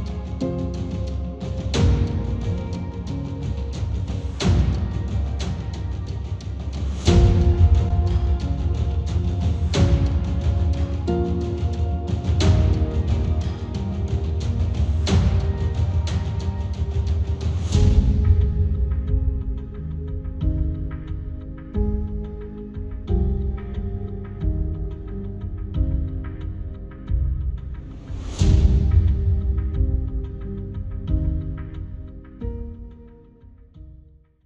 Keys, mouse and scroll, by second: 5.8 middle click, 6.2-17.2 drag, 16.1 space, 17.2-24.4 middle drag, 17.6 space, 17.6 r, 26.4 middle click, 26.9-34.4 drag, 28.3 space.